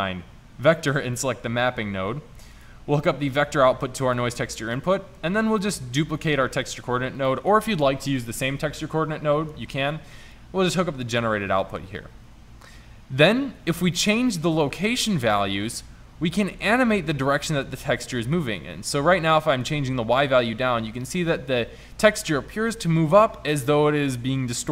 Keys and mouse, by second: 6.1 shift+d.